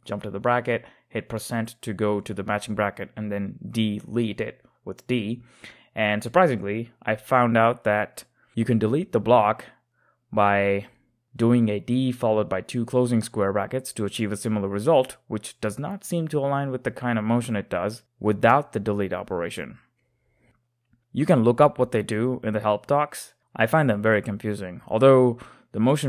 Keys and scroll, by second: 0.0-2.0 typing, 4.1 d, 7.1-8.5 typing, 9.8-10.5 typing, 12.4-14.0 typing, 17.0-21.5 typing, 22.7 typing.